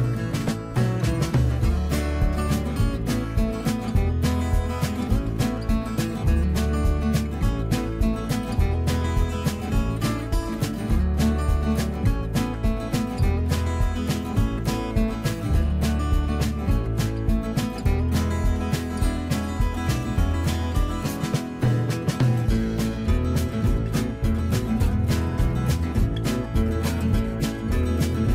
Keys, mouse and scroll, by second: 1.8-4.3 middle drag, 4.3 shift+click, 5.3-7.4 middle drag, 7.4 shift+click, 10.1-17.1 middle drag, 17.1-17.8 typing.